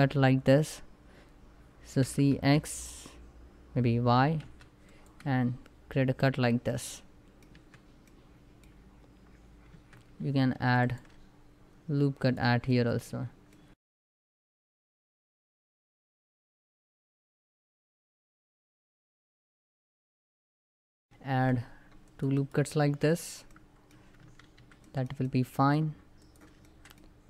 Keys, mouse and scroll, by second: 1.8 typing, 4.1 y, 4.5 click, 4.9 space, 6.0 scroll down 1, 6.3 middle click, 7.3 Tab, 7.7 middle click, 8.4 scroll up 1, 9.4 Tab, 10.2 ctrl+r, 10.5 ctrl+click, 11.9 click, 12.4-13.8 middle drag, 13.8 s, 14.0 z, 14.2 click, 14.6 middle click, 15.4-18.2 typing, 15.6 alt+click, 15.7 shift+middle click, 16.0 click, 16.6 click, 16.8 middle click, 17.7 click, 18.4 click, 18.6 scroll down 1, 18.7 middle click, 18.9 Tab, 19.0 middle click, 19.2 Tab, 19.4 ctrl+r, 19.5 ctrl+scroll up 1, 19.6 Tab, 19.7 click, 19.9 middle click, 20.0 scroll up 1, 20.1 ctrl+r, 20.7 a, 20.9 middle click, 21.0 ctrl+r, 21.1 ctrl+scroll up 1, 21.7 click, 22.0 right click, 22.5 Tab, 22.8 scroll down 1, 23.2 middle click, 24.0 ctrl+s, 24.5 ctrl+middle click, 25.3 scroll up 1, 25.9 click, 26.3 shift+middle click, 26.8 scroll up 1.